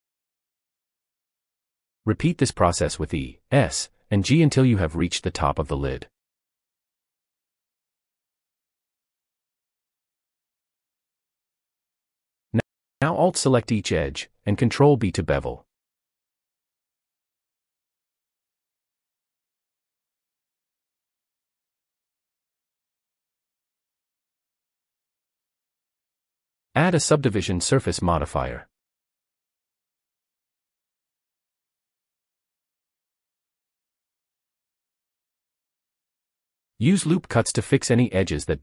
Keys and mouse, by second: 0.2 e, 2.2 click, 2.6 e, 4.2 e, 4.4 s, 6.2 g, 6.4 z, 7.9 e, 9.7 e, 9.9 s, 10.8 click, 11.3 e, 13.2 ctrl+b, 15.4 shift+click, 16.5 ctrl+b, 17.8 ctrl+b, 20.0 ctrl+b, 20.8 alt+click, 23.4 a, 25.1-28.7 drag, 36.1 click, 36.9-38.5 drag.